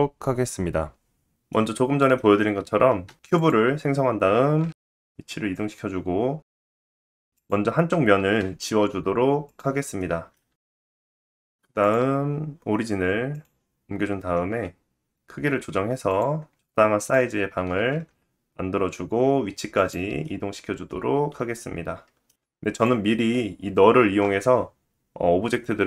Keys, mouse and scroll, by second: 1.6 shift+a, 4.0 g, 4.5-6.6 middle drag, 6.8 Tab, 7.3 click, 8.2 x, 9.5 middle click, 10.0 Tab, 11.8-15.9 drag, 14.0 s, 15.9-18.6 middle drag, 15.9 s, 17.5 g, 18.6-25.8 drag, 19.7 middle click, 21.7 g, 22.3 g.